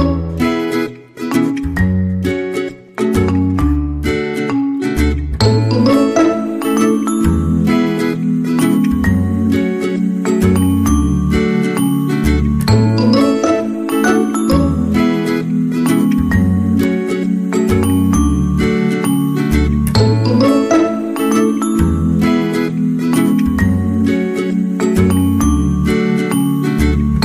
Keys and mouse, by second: 0.9 k, 4.0 right click, 4.1 g, 5.5 KP_3, 6.2 alt+z, 6.9 shift+middle click, 8.3 n, 9.4 ctrl+z, 10.5 n, 12.0 ctrl+z, 12.4 ctrl+z, 12.8 right click, 14.0 b, 15.9 w, 17.2 alt+z, 17.5 shift+middle click, 19.1 c, 21.1 alt+z, 21.8 g, 24.1 shift+middle click, 24.7 alt+z, 25.3 alt+z, 25.8 c, 26.6 g.